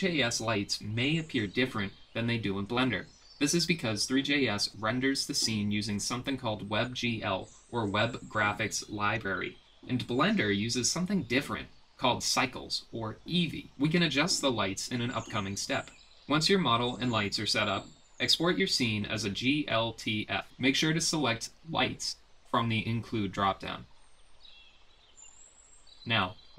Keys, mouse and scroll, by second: 0.5 ctrl+c, 0.7 ctrl+v, 0.8 g, 1.9 KP_7, 4.1 g, 5.3 ctrl+c, 5.5 ctrl+v, 6.0 g, 7.2 click, 8.0 click, 9.1 click, 9.2 click, 9.6 click, 10.1 click, 10.2 click, 10.6 middle click, 11.6 shift+click, 12.0 click, 12.1 click, 12.9 shift+click, 14.3-14.9 drag, 15.6 click, 15.9 click, 17.8-19.2 drag, 26.5 middle click.